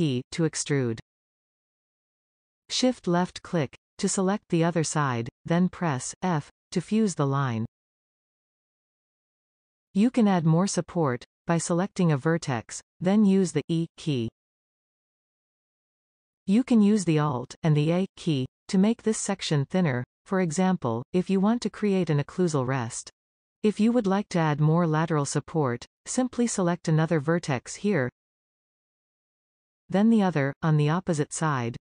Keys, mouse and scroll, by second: 3.4 shift+click, 6.1 f, 8.0 scroll down 2, 8.1-9.2 middle drag, 9.4 scroll up 1, 9.6-11.1 shift+middle drag, 11.1 click, 13.1 e, 18.0 ctrl+a, 21.7 scroll down 1, 22.3-27.0 middle drag, 27.0 click, 27.6-28.9 middle drag, 30.8 shift+click.